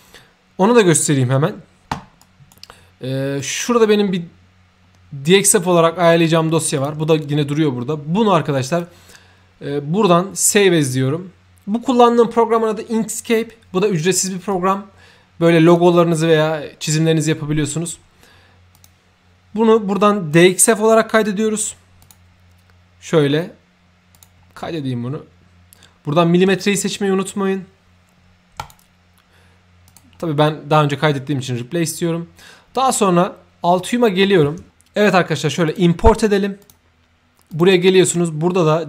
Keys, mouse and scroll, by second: 2.2 right drag, 3.4 click, 4.9-5.4 scroll up 2, 5.5 scroll down 2, 6.0 click, 6.7 click, 8.6 click, 10.5 click, 14.4-15.7 drag, 18.7 click, 22.0 click, 24.1 click, 28.6 click, 29.8 click, 33.8 click, 34.7 ctrl+y, 35.6 click, 36.6 click, 37.5 click.